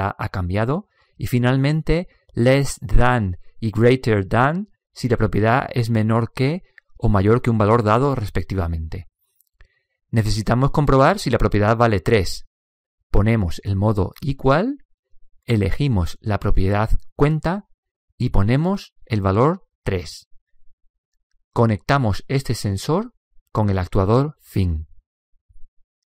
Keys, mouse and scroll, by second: 1.1 click, 3.5 click, 9.8 click, 15.4 click, 18.2 middle click, 19.1 click, 22.4 click.